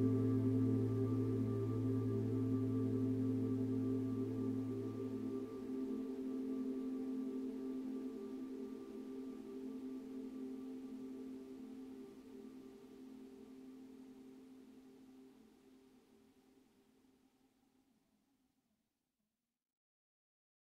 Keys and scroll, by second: 20.0 4.